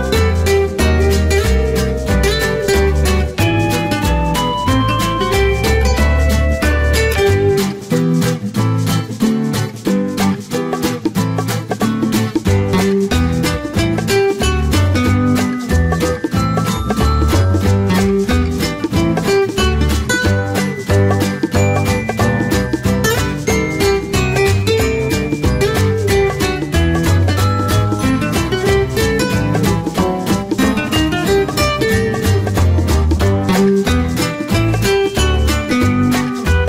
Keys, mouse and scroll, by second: 2.8 click, 13.3 KP_3, 13.4 KP_0, 14.2 click, 15.7-17.3 typing, 20.4 click, 26.4 click, 33.8 Delete.